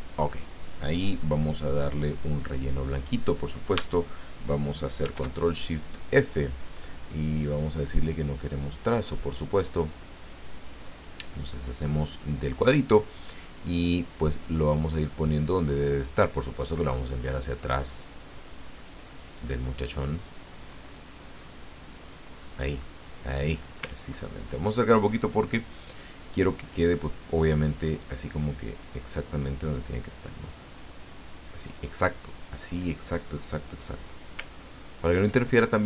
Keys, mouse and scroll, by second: 2.1 click, 5.0 ctrl+shift+f, 7.3 click, 8.4 click, 10.6 click, 12.1 click, 13.2-15.4 drag, 16.8 click, 17.4 click, 17.8 click, 18.3 click, 18.8 click, 19.3 click, 19.8 click, 20.2 click, 20.8 click, 22.0 click, 24.1-24.5 ctrl+scroll up 2, 25.9 click, 27.4-32.1 drag, 32.8-34.1 drag, 34.6 ctrl+scroll down 2.